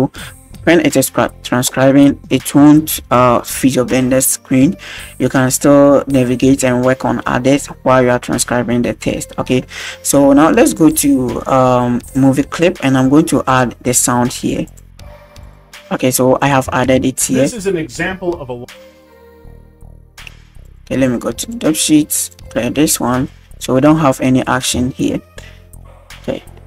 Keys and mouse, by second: 6.4-7.9 middle drag, 13.5-14.8 drag, 16.5 click, 17.0 space, 18.6 space, 19.0 click, 21.5 click, 21.5 space, 22.2 drag, 22.9 right click, 23.2 shift+right click, 23.5 shift+right drag, 24.4 right click, 24.8 shift+middle click, 25.1 middle click.